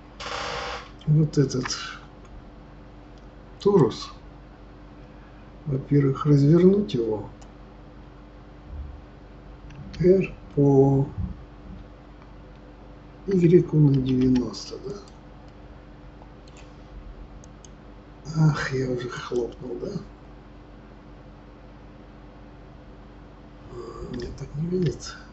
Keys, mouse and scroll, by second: 1.4 shift+a, 9.7 r, 15.4-17.4 middle drag, 17.4 click, 24.8 ctrl+z.